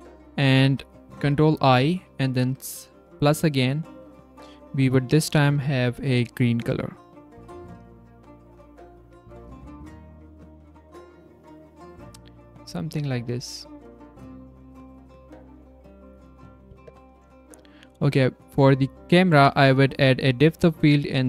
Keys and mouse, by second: 2.6 click, 3.0 ctrl+click, 9.0 Tab, 9.3 click, 9.7 z, 13.9 middle click, 15.4 click, 19.9 click.